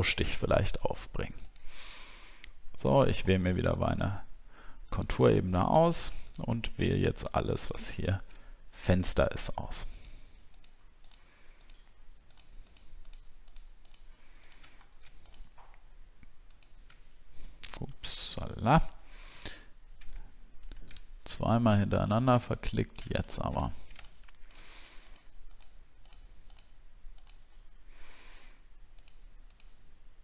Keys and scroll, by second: 7.9 alt+scroll up 1, 14.7 alt+scroll up 1, 17.9 ctrl+z, 18.5 alt+scroll up 1, 20.5 ctrl+z, 23.7 alt+scroll down 1.